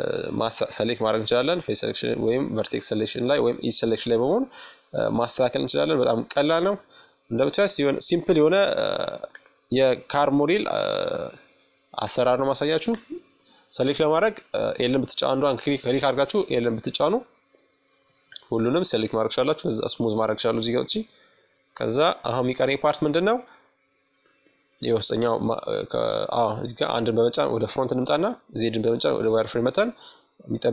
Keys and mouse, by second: 0.1 middle click, 0.8-1.9 right drag, 1.6-3.8 drag, 4.4-6.1 middle drag, 5.7 Tab, 6.8-8.7 right drag, 7.8 Tab, 9.6-14.9 right drag, 10.4 l, 14.1 l, 16.3-20.2 drag, 18.6 Tab, 20.2-21.7 middle drag, 21.7-26.5 drag, 24.1 KP_1, 25.3 z, 26.5 middle click, 27.3 middle click, 28.2-30.7 drag.